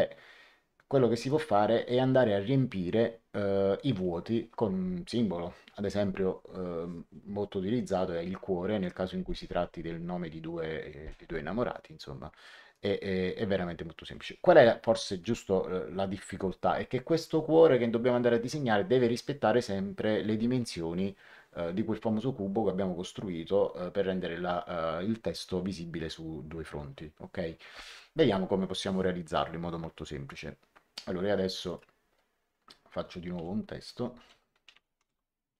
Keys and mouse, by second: 1.2 click, 12.6 click, 30.2 click, 31.6 click, 33.3-35.5 typing.